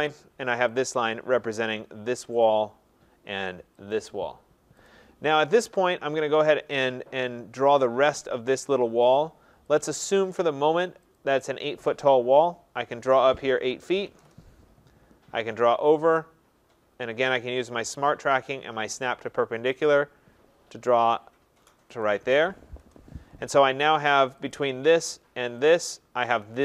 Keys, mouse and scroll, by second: 0.8 click, 2.5 click, 3.9 click, 5.9 click, 6.4 click, 9.8 click, 11.2 click, 13.6-14.9 typing, 14.2 Return, 19.9 click, 22.1 click, 22.8 Return, 24.5 click, 25.8 click.